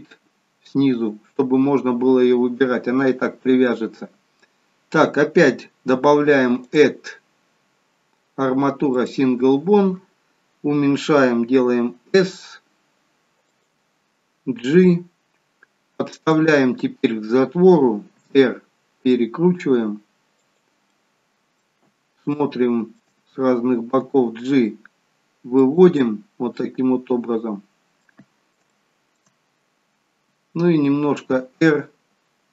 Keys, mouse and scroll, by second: 3.3-4.4 scroll up 2, 4.4 middle click, 6.5 click, 14.6 g, 18.1 r, 20.9 middle click, 22.3 shift+middle click, 23.8 g, 25.9 middle click, 28.7 shift+middle click, 29.4 scroll up 3, 31.1-31.7 scroll up 2, 31.1 r.